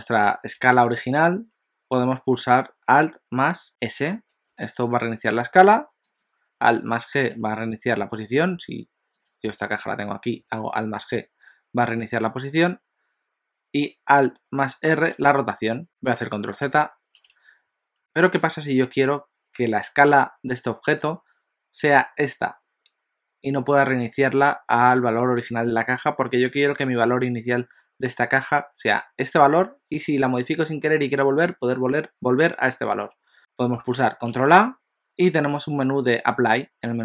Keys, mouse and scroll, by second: 4.3 alt+s, 6.3 click, 7.1 alt+g, 8.4 g, 9.3 click, 9.5 g, 11.0 alt+g, 15.1 alt+r, 15.9 ctrl+z, 16.6 ctrl+z, 18.0 click, 34.2 ctrl+a.